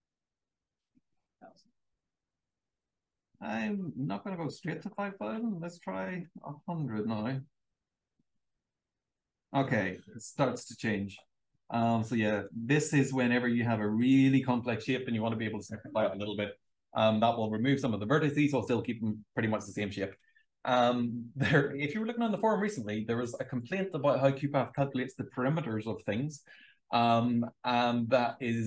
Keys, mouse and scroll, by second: 0.0-1.1 typing, 1.7 click, 6.0 1, 6.3 0, 8.1 click.